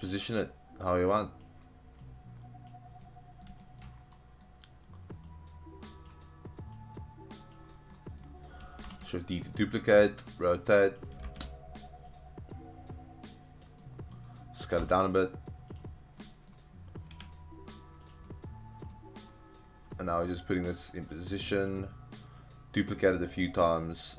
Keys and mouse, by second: 0.4-1.5 drag, 2.0-2.7 drag, 3.1-3.5 middle drag, 3.6 shift+middle click, 4.1-4.5 middle drag, 5.3-6.1 drag, 6.8-7.6 drag, 7.9 middle drag, 8.8 shift+d, 9.5 click, 10.3-11.0 drag, 11.3 ctrl+z, 12.1-13.6 drag, 13.8-14.1 middle drag, 14.8 s, 15.7 click, 16.2 middle click, 17.1 g, 18.0 click, 18.3-19.0 middle drag, 19.9-20.3 middle drag, 21.1-21.7 drag, 22.4-23.3 drag, 23.5-24.1 middle drag.